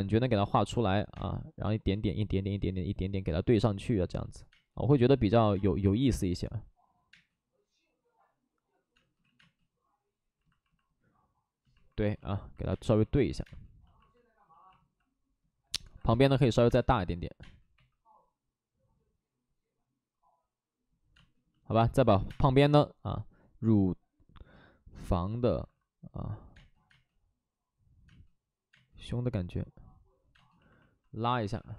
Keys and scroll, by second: 1.1 space, 4.4 space, 5.5 space, 6.0 3, 7.0 space, 9.1 ctrl+z, 9.3 space, 12.6 space, 13.3 space, 15.8 alt+s, 16.6 space, 17.3 space, 17.6 2, 21.1 space, 22.1 5, 22.2 space, 25.5 alt+s, 25.5 space, 26.5 space, 28.0 space, 28.6 space, 31.3 alt+s.